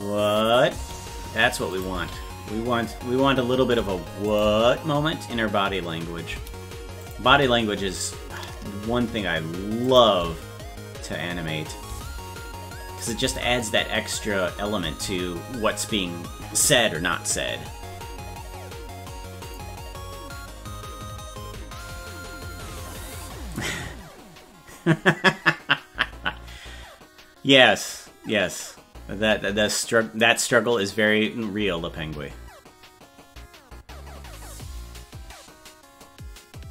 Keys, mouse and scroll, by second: 1.7 click, 1.9 space, 4.3 click, 7.0 click, 7.2 space, 9.8 click, 9.8 space, 13.0 click, 13.2 space.